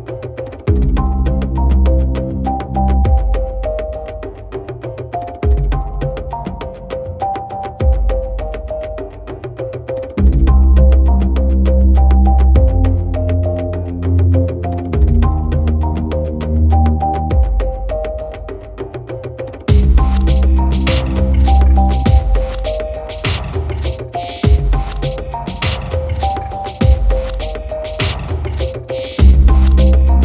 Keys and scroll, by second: 2.6 ctrl+j, 2.7 ctrl+t.